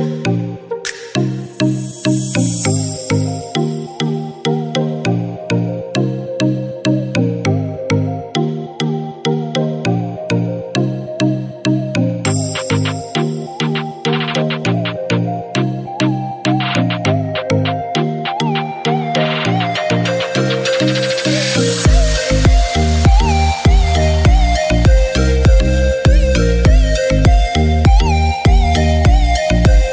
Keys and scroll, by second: 14.6 b, 18.1 x, 20.4 ctrl+z, 27.9-29.9 typing.